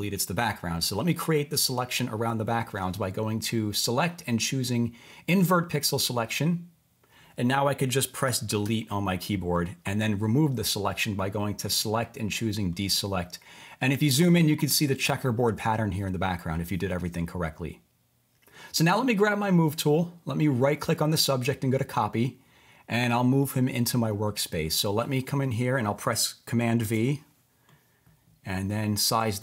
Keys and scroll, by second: 8.6 BackSpace, 26.8 super+v.